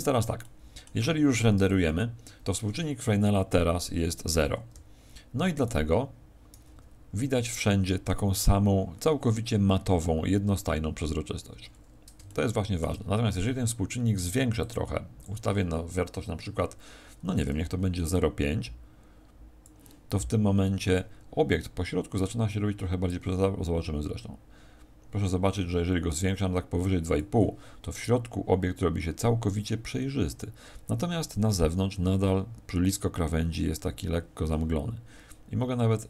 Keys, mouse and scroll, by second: 0.3 middle click.